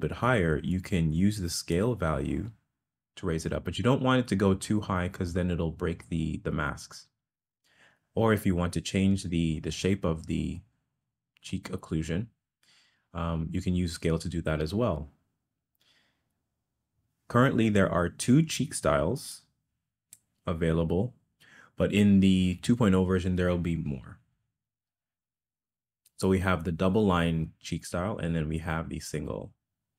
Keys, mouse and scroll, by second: 1.8-15.0 drag, 19.4 click, 28.2 click.